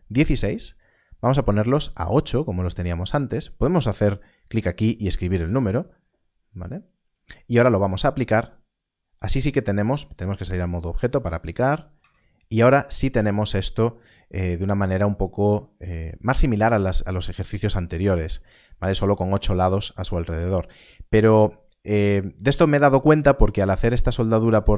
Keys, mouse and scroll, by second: 1.1 click, 5.3 click, 7.1 Escape, 7.8 Escape, 9.7 Tab, 10.9 click, 11.9 Tab, 13.0 a, 23.5-24.7 scroll up 1.